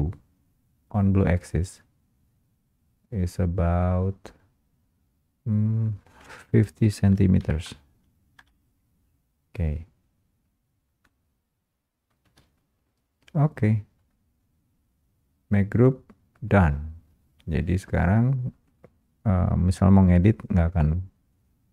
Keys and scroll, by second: 8.4 Return, 12.2 space, 13.0 space.